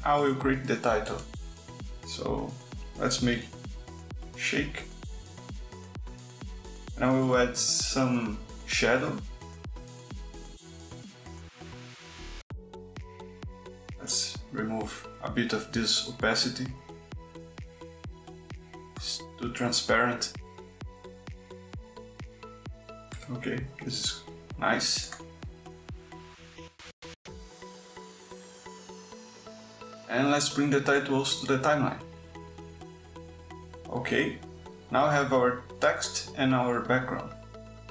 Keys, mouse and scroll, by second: 1.0 click, 1.3 middle click, 2.2 click, 2.5 middle click, 3.8-5.4 typing, 6.3 click, 6.8 click, 9.8 click, 11.7 click, 12.8 KP_5, 13.1 click, 13.5 KP_5, 14.8 click, 18.8 click, 19.2 click, 20.4 click, 21.4-23.4 drag, 23.7 click, 24.1 click, 26.8 click, 29.1 click, 30.6-32.3 drag, 33.0-35.4 drag.